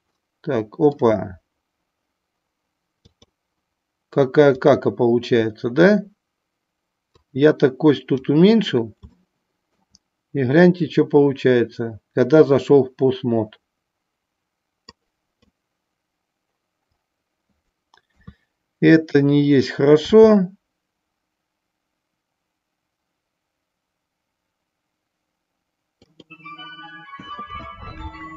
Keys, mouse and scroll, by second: 3.0-4.7 drag, 7.1-28.3 drag.